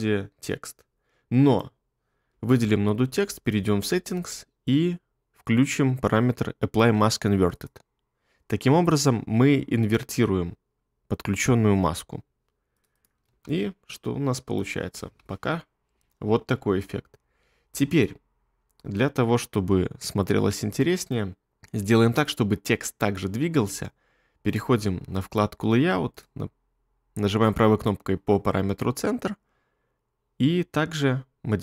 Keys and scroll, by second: 13.3 space, 15.0 space.